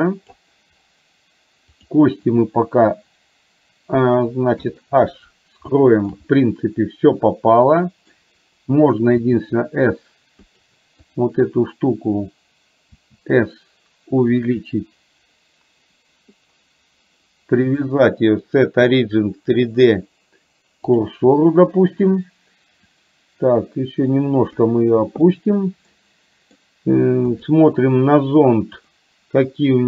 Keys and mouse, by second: 1.8 click, 4.6 h, 5.8 shift+middle drag, 6.4-8.2 middle drag, 10.6 drag, 11.1 click, 17.8-21.2 drag, 22.9 click, 23.4-24.7 drag, 25.4-26.7 middle drag, 28.8 click.